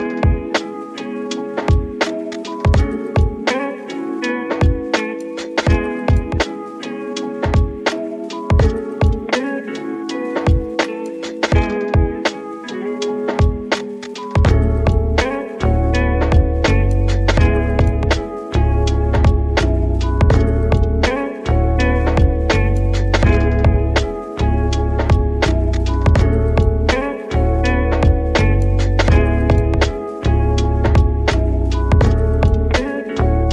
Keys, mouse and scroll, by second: 5.2-5.5 scroll down 6, 5.5 middle click, 6.1 click, 6.4 middle click, 7.3 shift+d, 7.7 shift+y, 8.6 click, 8.7 r, 9.9 click, 10.2 middle click, 10.6 g, 12.5 r, 14.1 scroll down 2, 14.4-16.4 middle drag, 16.4 r, 18.0 g, 20.3 middle click, 21.2 g, 24.1 shift+d, 24.4 x, 26.5 click, 26.7 r, 27.9 g, 30.3 click.